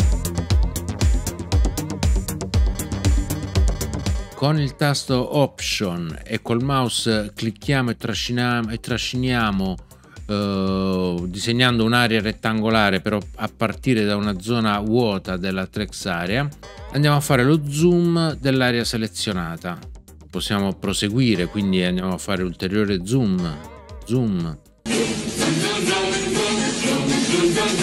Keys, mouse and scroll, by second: 0.3 super+Down, 0.9 super+Right, 1.5 super+Down, 2.5 super+Up, 2.7 super+Left, 2.9 super+Up, 3.3 super+Left, 3.4 super+Up, 3.5 super+Left, 3.6 super+Up, 4.0 super+Up, 4.1 super+Left, 16.6 alt+click, 21.3 alt+click.